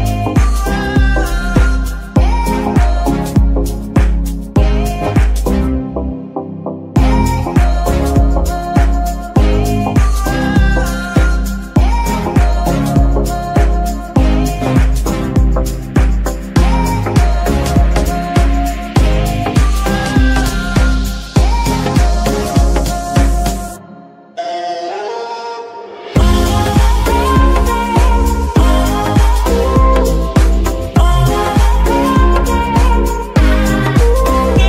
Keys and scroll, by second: 3.5 g, 4.7 Escape, 8.6 g, 9.4 Escape, 11.3 g, 11.9 Escape, 14.5 g, 15.3 Escape, 32.4 ctrl+shift+s, 32.8 ctrl+shift+z, 33.8 a.